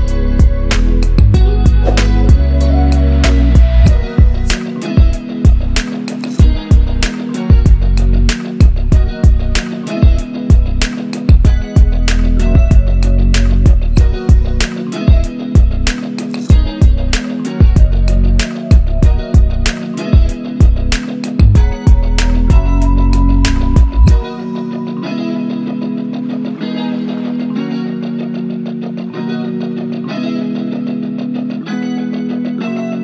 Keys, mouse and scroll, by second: 0.5 click, 0.9 shift+click, 2.5 scroll up 1, 3.4-8.8 drag, 9.9 scroll down 1, 10.7 scroll down 1, 11.1 click, 12.0 right click, 12.6 click, 13.7-14.7 scroll up 1, 14.7 click, 17.4-24.8 drag, 18.4 click, 30.0-33.0 click.